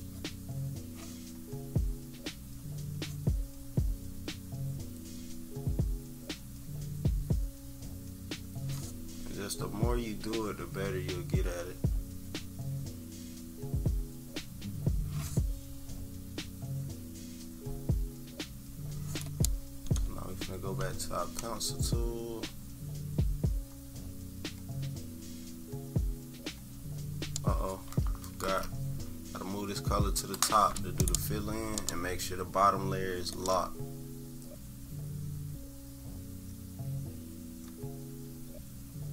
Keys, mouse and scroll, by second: 4.2 click, 14.2 click, 20.9 click, 21.9 click, 28.4 shift+z, 30.2-39.1 drag.